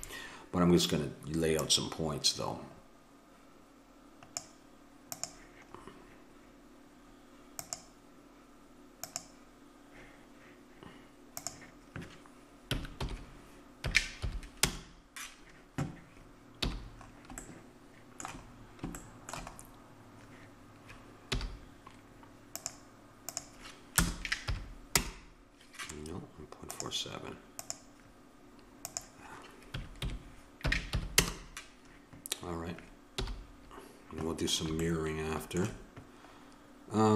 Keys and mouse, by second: 1.6-3.3 drag, 5.1-7.3 drag, 7.6-14.6 middle drag, 16.6 n, 17.4-18.5 middle drag, 21.3 n, 22.6-24.5 drag, 26.7-30.7 drag, 33.1 n.